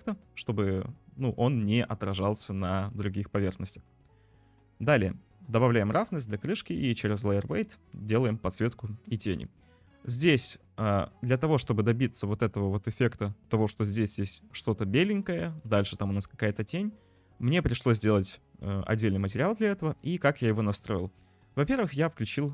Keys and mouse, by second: 1.4 shift+middle click, 4.6 click, 5.2 click, 5.7-8.6 drag, 10.0 shift+click, 11.1 shift+drag, 15.4 shift+middle drag, 16.5 shift+middle drag, 19.1 click, 20.6 click, 21.4 click, 22.3 click.